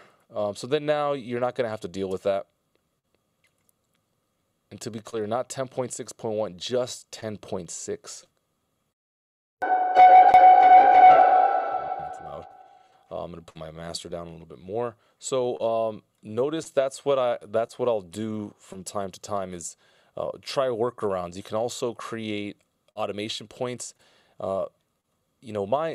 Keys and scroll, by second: 2.6 space, 9.4 space, 11.7 BackSpace, 14.6 i, 19.6 BackSpace, 21.5 a.